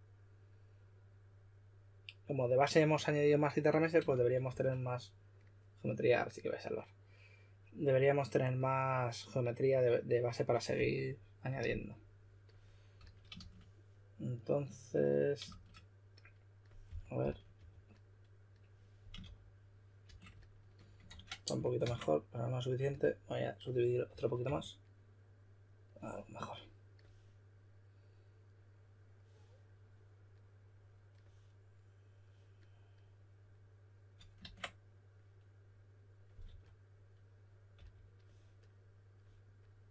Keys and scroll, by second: 4.0 shift+f, 4.4 shift+f, 12.9 s, 15.4 shift+s, 16.6-18.0 typing, 19.1-20.0 typing, 21.0 super+z, 21.7 super+d, 24.0-24.4 typing, 36.4 typing, 37.7 typing.